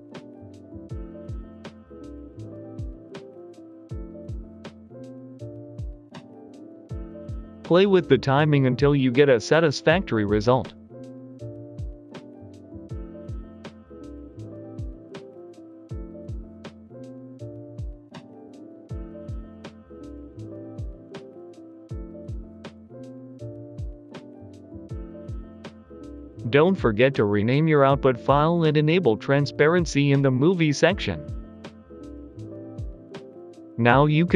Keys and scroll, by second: 7.0 g, 7.2 x, 8.1 Escape, 8.1 Delete, 8.1 g, 8.1 y, 9.2 g, 9.5 Escape, 9.5 x, 11.5 typing, 12.0 Delete, 13.2 g, 13.2 x, 17.2 Delete, 17.5 g, 18.0 shift+y, 26.1 ctrl+s, 28.2 typing, 28.5 Return.